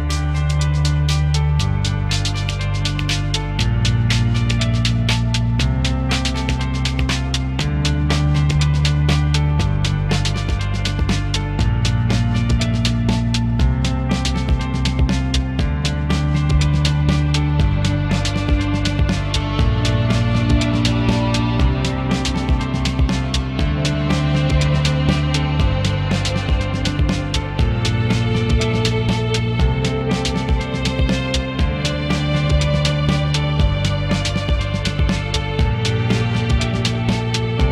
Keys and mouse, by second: 0.4 shift+middle click, 0.5 click, 1.2 shift+middle click, 1.5 f, 1.8 click, 4.4 shift+middle click, 4.7 click, 5.1 shift+middle click, 5.2 click, 5.6 shift+middle click, 5.8 click, 6.4 shift+middle click, 7.4 shift+middle click, 7.7 click, 8.0 f, 9.2 ctrl+click, 10.6 ctrl+click, 12.0 click, 12.7 click, 13.0 shift+middle click, 13.4 ctrl+click, 14.2 ctrl+middle click, 15.0 shift+middle click, 15.2 click, 15.8 f, 17.0 shift+middle click, 17.2 f, 17.2 click, 17.4 ctrl+middle click, 17.7 click, 18.5 shift+middle click, 19.0 click, 19.4 f, 19.5 click, 19.8 shift+middle click, 20.0 f, 21.0 f, 22.2 click, 22.8 shift+middle click, 23.4 click, 23.6 shift+middle click, 24.2 f, 24.6 click, 25.3 shift+middle click, 25.4 click, 26.1 click, 26.4 f, 27.3 shift+middle click, 27.9 click, 28.2 shift+middle click, 28.3 f, 28.4 shift+middle click, 28.6 click, 29.8 click, 30.2 f, 30.2 click, 31.2 shift+middle click, 31.5 click, 31.7 shift+middle click, 31.9 click, 32.2 ctrl+click, 32.6 ctrl+click, 33.2 f, 34.3 shift+middle click, 34.8 ctrl+click, 35.7 click.